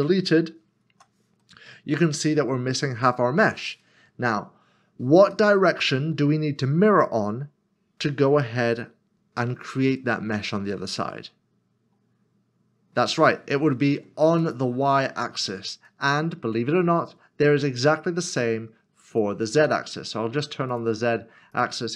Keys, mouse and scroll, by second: 1.4 middle click, 3.8 middle click, 4.4 scroll down 1, 5.3 scroll down 1, 5.5 middle click, 14.4 middle click, 19.1 click.